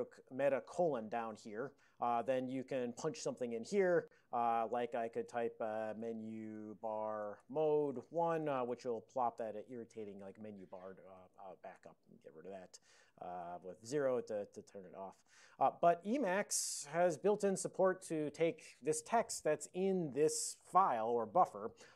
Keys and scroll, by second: 0.8 alt+:, 4.8-8.9 typing, 11.2 alt+:, 11.8 alt+p, 13.2 ctrl+e, 13.4 alt+b, 13.7 ctrl+d, 14.3 Return, 16.0 ctrl+n, 16.5 ctrl+n, 16.6 ctrl+n.